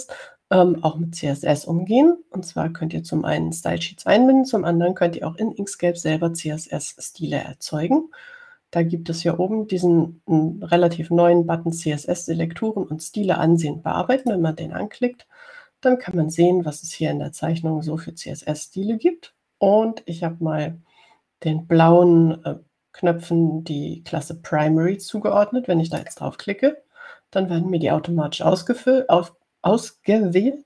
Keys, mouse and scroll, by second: 15.4 click, 27.2 click.